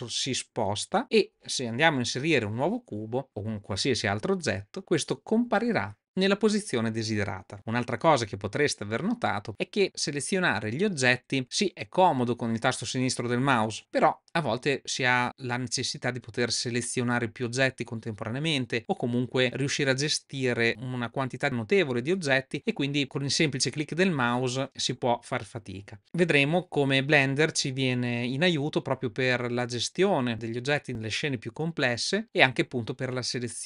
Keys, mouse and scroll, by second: 2.2 shift+a.